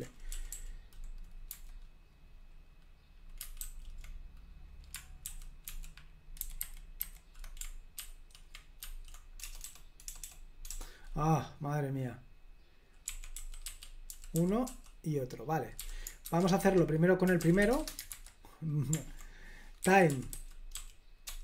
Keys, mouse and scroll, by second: 0.4 k, 0.6 k, 1.6 h, 3.7 ctrl+a, 5.3 alt+f, 5.8 alt+f, 6.5 alt+b, 6.7 alt+b, 7.1 alt+b, 8.1 ctrl+w, 8.9 ctrl+w, 9.7 BackSpace, 12.9-18.2 typing, 16.7 Escape, 19.7-21.4 typing.